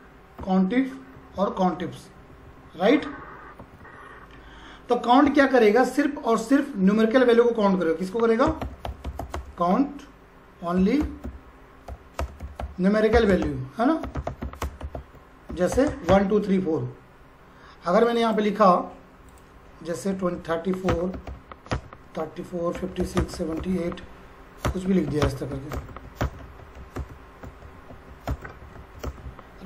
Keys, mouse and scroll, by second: 1.8 Up, 3.6 Right, 8.2-16.4 typing, 18.0 click, 19.8-28.8 typing, 20.9 Return, 27.0 Return, 28.3 Return, 29.0 Return.